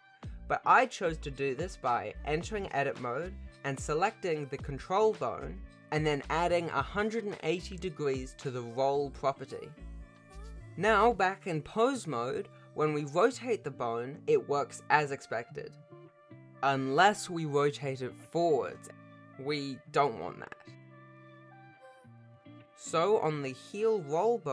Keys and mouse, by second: 0.0 Tab, 1.1 shift+middle click, 2.8 click, 4.4 n, 6.7 click, 7.8-9.5 drag, 9.9 ctrl+Tab, 10.5 r, 22.0 click, 23.0 click, 23.2 click, 23.6-24.5 drag.